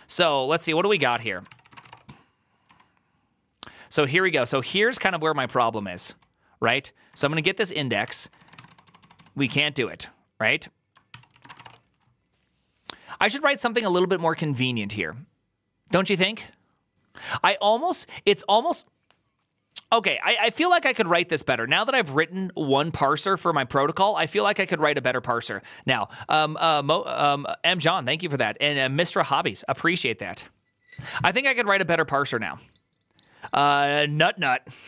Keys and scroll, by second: 0.2 ctrl+d, 0.6-2.6 typing, 4.3 ctrl+c, 4.4-9.5 typing, 11.0 ctrl+c, 11.1-12.0 typing, 20.5 alt++.